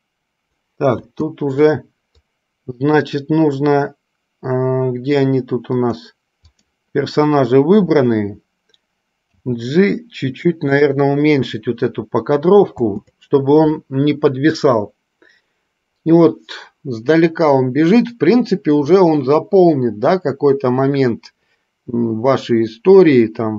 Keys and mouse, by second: 1.1 space, 2.3-3.2 drag, 6.0 click, 6.8 click, 9.3 g, 12.8 space.